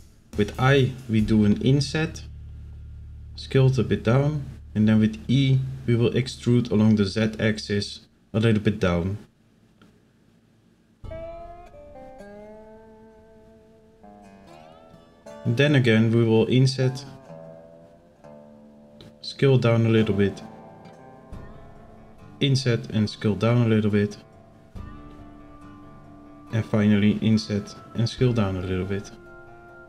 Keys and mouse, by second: 3.7 e, 14.0 right click, 15.7 i, 20.1 i, 24.0 i, 26.7 i.